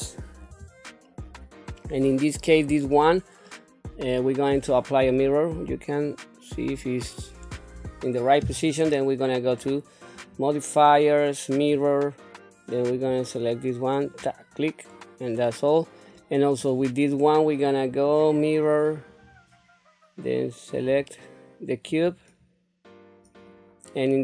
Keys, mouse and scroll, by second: 0.5 KP_7, 3.4-4.5 middle drag, 6.0 click, 9.5 click, 10.1-11.7 drag, 12.9 click, 14.9-16.0 middle drag, 16.6 click, 17.9-19.2 drag, 20.7 click, 23.5-24.2 middle drag.